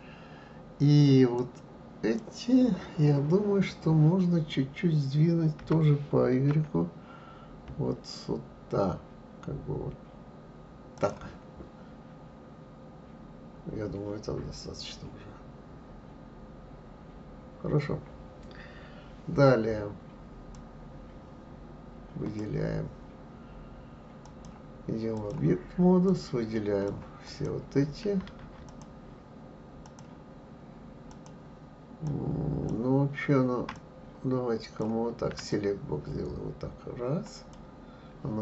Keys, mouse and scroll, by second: 1.3 click, 5.6 g, 20.5 click, 24.2-26.2 drag, 27.2 click, 28.7 shift+click, 29.8 shift+click, 31.0 shift+click, 32.0 shift+click, 33.7-35.6 drag.